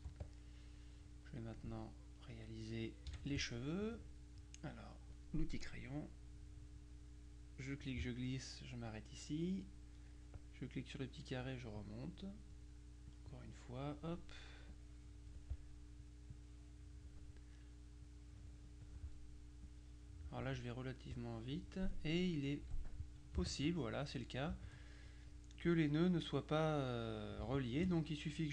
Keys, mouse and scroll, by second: 0.0 z, 0.3 click, 0.9 middle click, 2.1-3.2 middle drag, 3.1 F6, 6.0-8.4 drag, 10.2 click, 13.2-14.5 drag, 14.8-15.9 drag, 16.4-17.7 drag, 18.1 click, 19.7 click, 21.2 click, 22.7 F2, 23.6 shift+click, 27.6 shift+click.